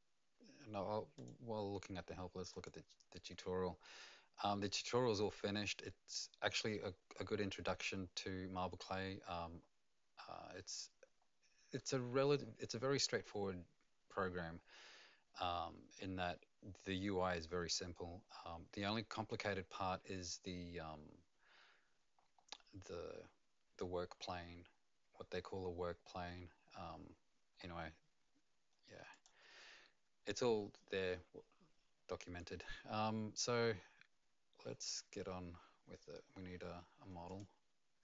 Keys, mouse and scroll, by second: 1.1 click, 2.5 click, 7.0-9.0 scroll down 11, 9.0-11.2 scroll up 2, 11.2-14.6 scroll down 3, 19.3-21.2 scroll down 1, 21.2-24.4 scroll down 11, 24.4-25.1 scroll down 6, 25.9-26.2 scroll down 4, 29.1 click, 29.1 scroll down 4, 37.2 click.